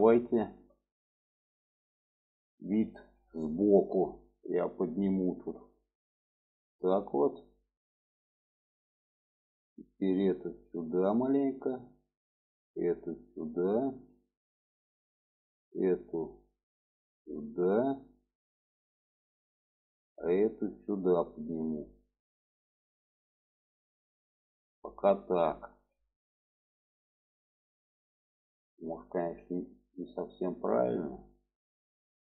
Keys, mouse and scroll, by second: 0.4 shift+middle click, 1.3 middle click, 1.9 alt+middle click, 2.9 shift+middle click, 3.8 click, 6.3-7.4 drag, 7.7 shift+middle click, 9.3 click, 10.2 click, 11.7 click, 12.5-13.6 drag, 13.8 shift+middle click, 14.8 click, 16.6-18.9 drag, 19.6 click, 20.6-24.5 drag, 25.6 alt+z, 26.1-32.3 middle drag.